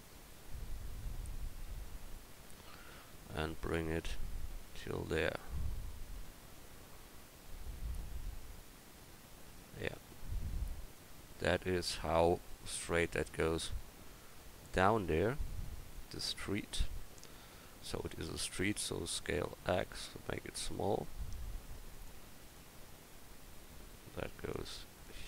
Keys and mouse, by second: 1.0 KP_1, 1.6 KP_3, 3.7 click, 4.5-5.4 drag, 15.7-16.2 middle drag, 17.0-18.1 middle drag, 18.7 s, 22.5-25.2 right drag.